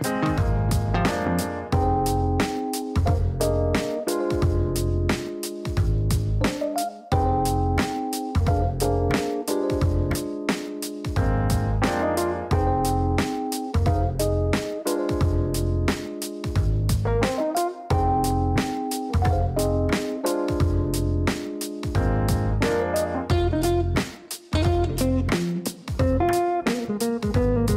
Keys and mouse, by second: 0.4 click, 1.1 click, 2.1 click, 2.7 click, 3.7-4.6 typing, 4.7 Down, 6.0-6.8 typing, 6.9 Down, 7.2 Down, 7.8-10.3 typing, 8.0 KP_Add, 11.5 click, 12.2 click, 14.5 click, 16.3 click, 16.8 space, 20.5 click, 22.3 click, 23.9 click, 25.6 click, 26.2 click, 27.5-27.7 typing.